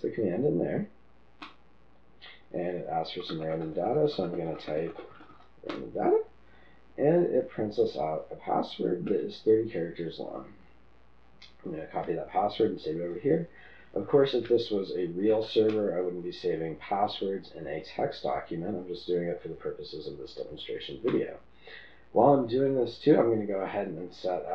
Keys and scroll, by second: 1.5 Return, 4.5-4.8 typing, 6.0 typing, 9.1 typing, 13.5 ctrl+v, 15.2 typing, 16.5 typing, 21.1 Return.